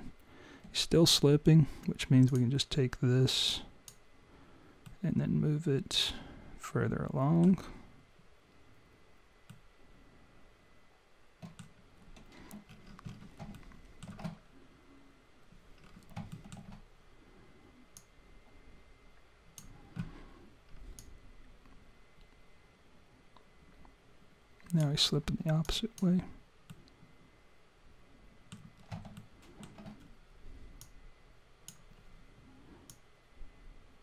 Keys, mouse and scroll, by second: 2.2 click, 3.6 click, 4.8 middle click, 9.7 middle click, 12.8-13.4 scroll up 9, 13.5 alt+middle click, 15.8-16.2 scroll down 4, 16.3 alt+middle click, 18.0 click, 25.6 click, 26.7 middle click, 29.2 alt+middle click, 30.8 click, 32.9 click.